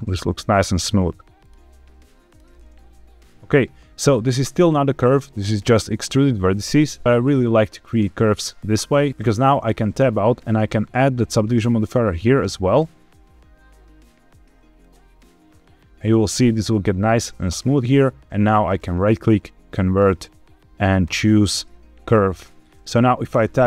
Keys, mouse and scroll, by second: 0.7 click, 1.3 click, 1.7 g, 2.2 click, 2.5-4.0 middle drag, 6.4 middle click, 7.6 shift+middle click, 8.2 middle click, 9.1 Tab, 9.9 Tab, 11.4-14.9 drag, 18.6-21.1 right drag, 23.3 Tab.